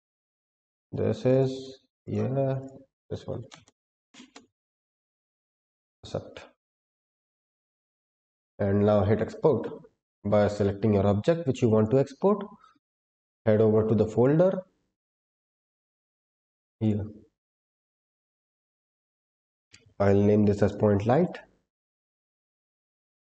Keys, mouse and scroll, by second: 5.8-9.4 scroll up 5, 10.0 click, 10.3 click, 11.7 click.